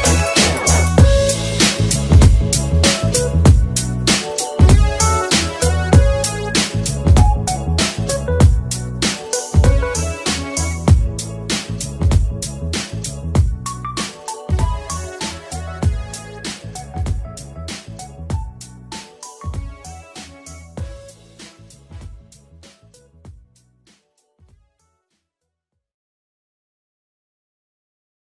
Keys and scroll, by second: 2.9 shift+Page_Down, 4.3 Delete, 5.9 2, 8.1 ctrl+c, 9.2 2, 9.6 ctrl+v, 13.6 ctrl+/, 15.3 2, 16.1 ctrl+c, 16.6 2, 17.1 ctrl+v, 26.3 2, 27.1 Delete.